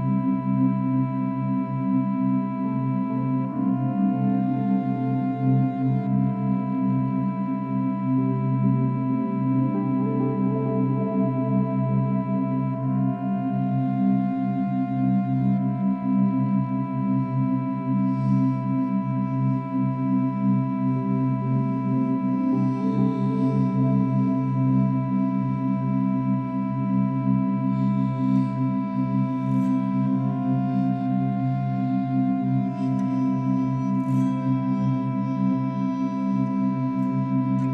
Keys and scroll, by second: 16.3 ctrl+z, 25.5 space, 27.9 ctrl+z, 28.7 ctrl+z.